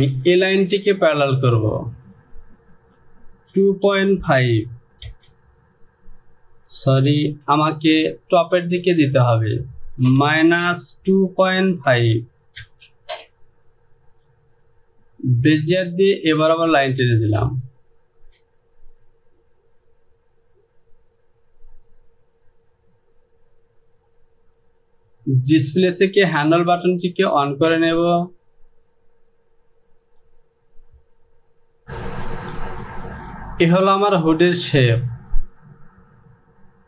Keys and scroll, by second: 3.6 KP_2, 3.9 KP_Decimal, 4.3 KP_5, 5.1 Return, 7.5 ctrl+z, 10.1 Down, 10.5 KP_Subtract, 11.2 KP_2, 11.5 KP_Decimal, 12.0 KP_5, 12.7 Return.